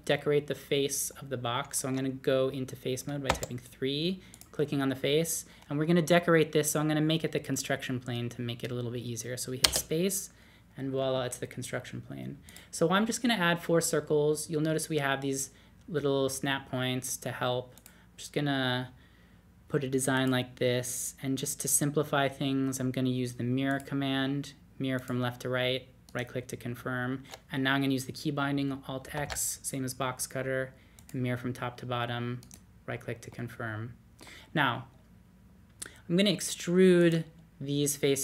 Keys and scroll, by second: 3.3-4.9 typing, 9.6 space, 26.2 typing, 29.1 alt+x.